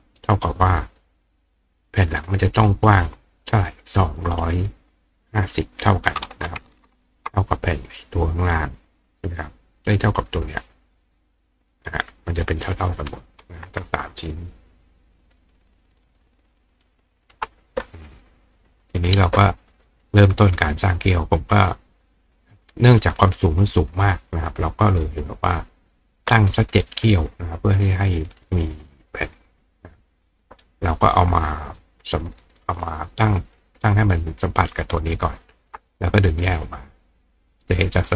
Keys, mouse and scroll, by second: 0.9 click, 2.0 click, 4.2 click, 9.9-11.7 drag, 13.4-15.7 drag, 16.2 ctrl+click, 17.5 click, 18.6 click, 19.0 right click, 24.3-26.0 drag, 31.1 click, 31.7 click, 33.8 click, 35.2 ctrl+click, 36.1 click, 37.0 click.